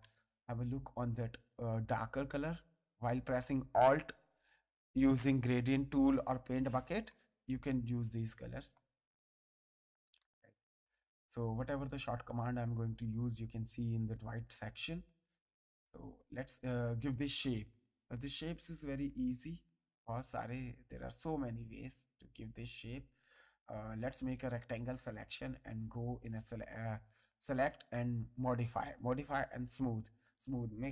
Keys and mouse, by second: 0.0 space, 0.1 ctrl+click, 2.5 alt+click, 10.2 space, 10.2 click, 11.8 click, 16.6 click, 18.7 right click, 19.8 click, 20.9 click, 26.2 click, 28.4 click, 29.6 click.